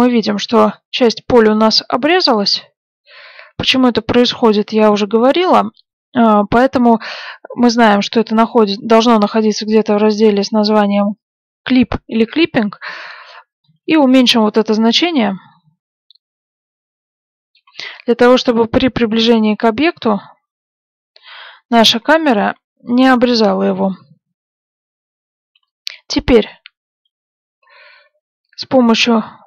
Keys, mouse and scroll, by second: 14.3 click, 26.4 click.